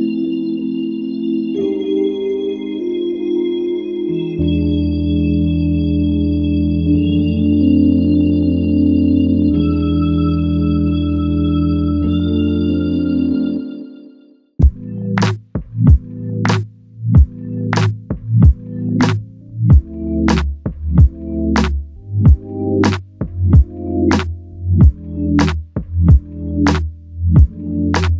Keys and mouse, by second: 4.0 alt+click.